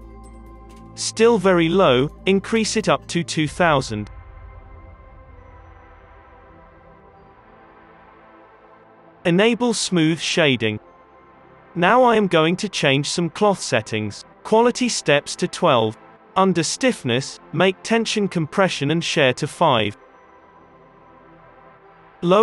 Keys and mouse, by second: 2.4 space, 4.1 r, 5.0 KP_0, 5.2 KP_0, 6.2 space, 9.6-12.4 middle drag, 11.9 space, 12.4 click, 14.3 middle click, 15.2-16.6 middle drag, 16.8-18.8 middle drag, 18.8-20.1 drag, 20.1-22.3 middle drag.